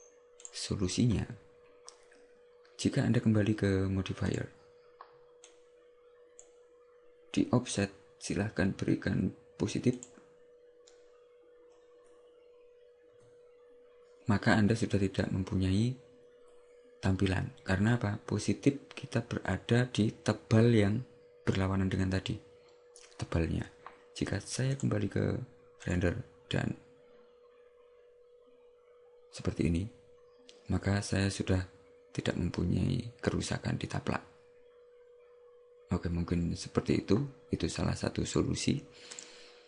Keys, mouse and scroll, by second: 0.6 click, 4.4 click, 5.5 click, 10.0 click, 24.8 click, 25.9 click, 39.2 click.